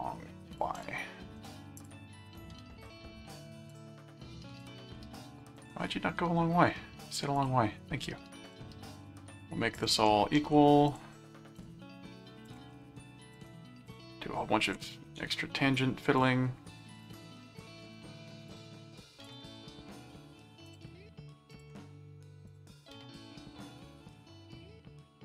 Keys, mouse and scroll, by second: 0.5 click, 1.8 click, 2.9 click, 3.7 click, 4.6 click, 5.6 click, 7.4 click, 8.4 click, 9.7 ctrl+click, 10.4 alt+q, 10.9 click, 11.5 ctrl+click, 12.4 ctrl+alt+click, 13.0 ctrl+alt+q, 13.3 click, 14.6 ctrl+alt+click, 15.2 alt+a, 16.2 click, 17.0 ctrl+click, 17.7 alt+a, 18.5 ctrl+click, 19.2 ctrl+alt+click, 19.5 ctrl+alt+a, 20.7 ctrl+click, 21.5 ctrl+alt+click, 21.8 ctrl+alt+a, 22.4 click, 24.1-25.2 middle drag.